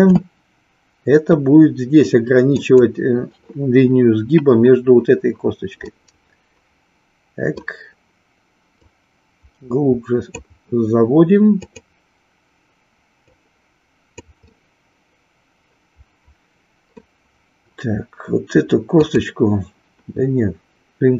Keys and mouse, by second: 5.8-7.7 middle drag, 8.7-10.3 drag, 11.6 click, 13.2 click, 14.4-17.0 middle drag, 19.0 click.